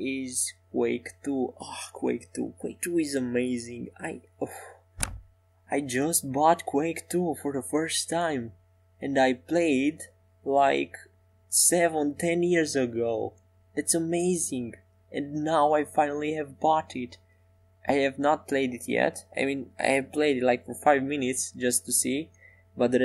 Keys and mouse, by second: 4.0-9.6 middle drag, 8.3 e, 9.6 s, 14.3 middle click, 18.2 shift+a.